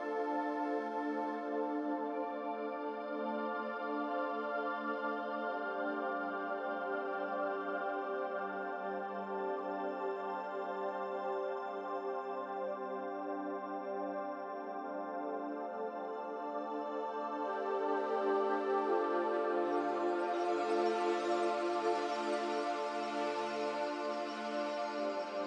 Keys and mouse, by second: 0.1 s, 3.7-5.2 drag, 5.9 s, 8.2 click, 9.2 click, 10.7-11.5 middle drag, 12.0 click, 13.8 click, 14.7 click, 15.7 click, 16.1-23.8 middle drag.